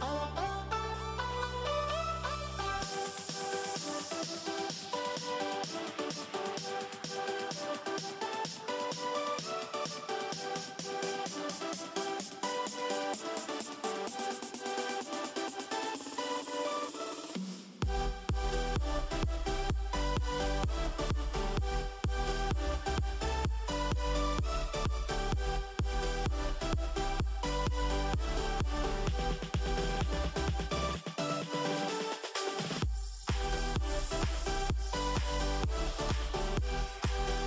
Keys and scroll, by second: 1.4 a, 3.4 -, 3.5 -, 5.1 a, 6.2-7.9 typing, 9.1 a, 15.6-18.3 typing, 21.1 -, 22.8 -, 23.8 n, 27.2-29.7 typing, 32.8 -, 34.5 -, 35.9-36.6 typing.